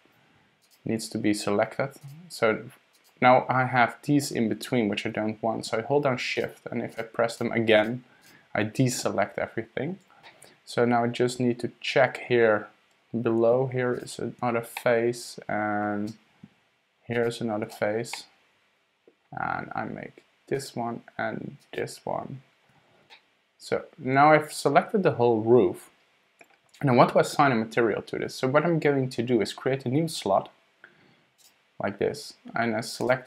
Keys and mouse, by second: 0.6 shift+super+click, 2.0 shift+super+click, 2.9 shift+super+click, 6.3 shift+click, 6.9 shift+click, 7.3 shift+click, 7.8 shift+click, 8.2 shift+click, 10.2 drag, 10.4 middle click, 11.3-11.8 drag, 11.8 middle click, 14.8-15.8 middle drag, 18.1 drag, 18.3-19.1 middle drag, 20.6 shift+click, 21.6 shift+click, 23.1 click, 23.2-24.8 middle drag, 24.8-26.5 drag, 31.4 click, 33.0-33.2 drag.